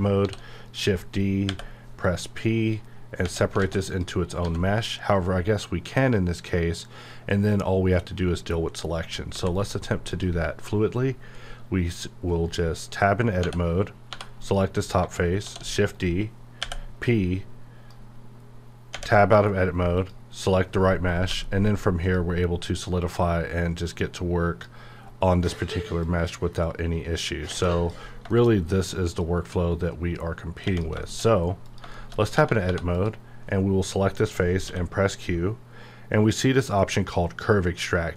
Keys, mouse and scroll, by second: 0.1 shift+d, 0.7 right click, 1.4 p, 1.9 click, 3.2 Tab, 3.6 alt+a, 3.9 click, 4.4 g, 5.1 right click, 9.3 x, 9.5 click, 13.4 Tab, 14.4 click, 15.4 shift+d, 15.9 right click, 16.6 r, 17.1-19.0 drag, 19.0 Tab, 19.9 click, 21.3 q, 21.9 click, 25.0-25.5 scroll up 1, 25.9-27.5 drag, 27.5 space, 28.1 scroll down 1, 28.3 shift+middle click, 28.5-29.2 scroll up 1, 29.2-30.6 drag, 30.8 space, 31.0 shift+scroll up 1, 31.3-31.6 scroll down 1, 31.6 click, 31.9 shift+middle click, 32.2 shift+scroll up 1, 32.3 Tab, 32.6 3, 32.9 click, 34.7 q.